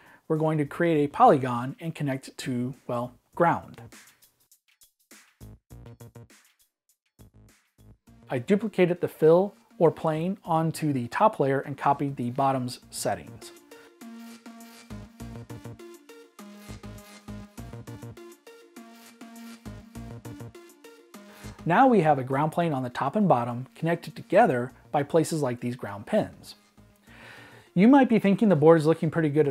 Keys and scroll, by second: 1.7 -, 18.5 super+b, 19.3 b.